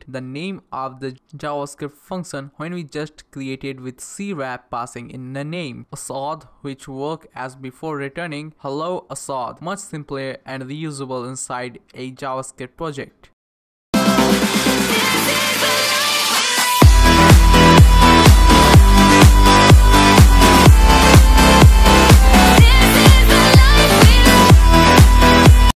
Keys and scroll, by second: 0.0-1.3 typing, 1.7 Right, 2.4 typing, 3.2 Left, 3.6-6.4 typing, 5.0 Left, 6.5 Right, 6.6 Right, 7.1 Return.